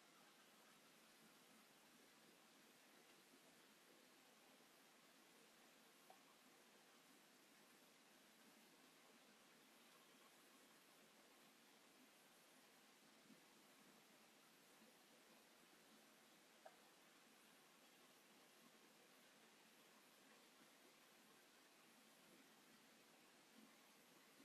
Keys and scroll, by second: 2.3 Escape, 3.4 m, 6.5 s, 7.9 m, 9.7 space, 17.6 Escape, 20.0 space, 20.1 Escape, 22.7 m, 23.6 q, 23.9 space.